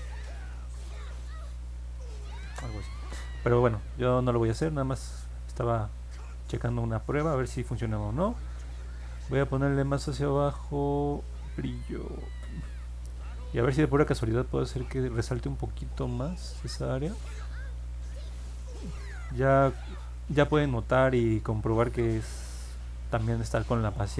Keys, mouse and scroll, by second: 2.4 ctrl+z, 10.9 click, 20.0 click.